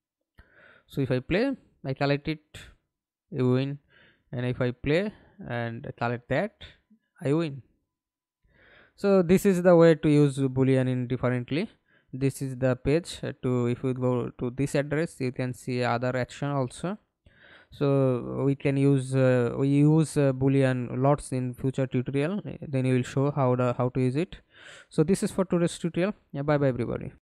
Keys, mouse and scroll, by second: 0.2 alt+p, 1.8-2.9 w, 3.4 a, 3.8 a, 4.2 Escape, 5.0 alt+p, 5.9-6.8 a, 7.3 a, 8.1 a, 8.7-9.2 d, 9.6 Escape, 11.1 alt+F9, 12.2 scroll down 1, 15.3 scroll down 2, 26.9 alt+F9.